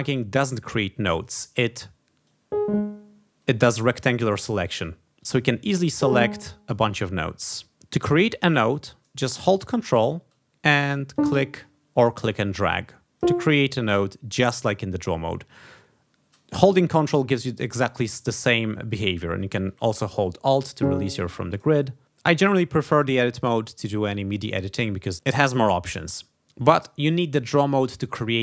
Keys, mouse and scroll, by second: 2.2-3.8 drag, 5.1 click, 5.8-6.8 drag, 10.9 ctrl+click, 12.0-13.4 ctrl+drag, 17.1-21.0 ctrl+drag.